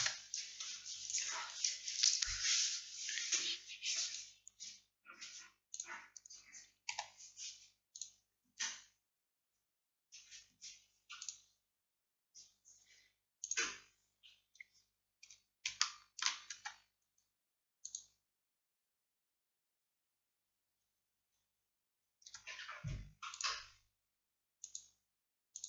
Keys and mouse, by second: 2.7-7.0 drag, 7.0 g, 9.3-15.9 drag, 16.7 Tab, 21.3 Tab, 22.4 Tab.